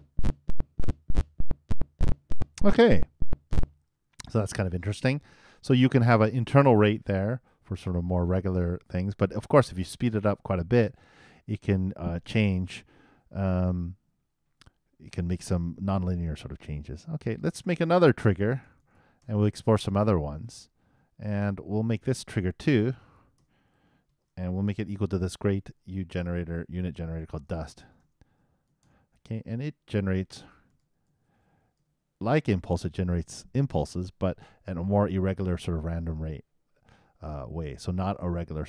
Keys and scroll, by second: 3.7 super+., 25.9 shift+space, 26.1 shift+s, 26.6 shift+BackSpace, 27.2 shift+d, 28.9-30.4 typing, 31.4 shift+2, 31.8 shift+;.